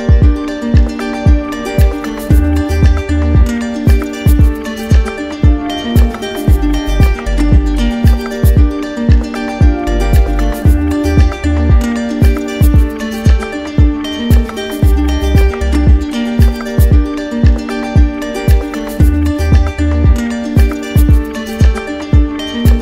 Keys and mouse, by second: 0.9-2.0 right drag, 2.3-3.4 right drag, 3.3 z, 5.2-6.2 drag, 7.0-8.1 right drag, 9.4-10.4 drag, 17.1 click, 18.4 click, 19.4 right click, 20.8 alt+right click.